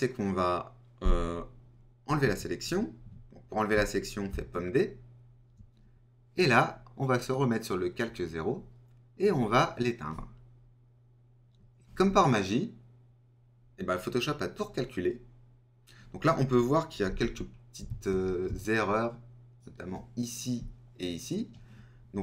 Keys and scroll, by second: 4.5 super+d.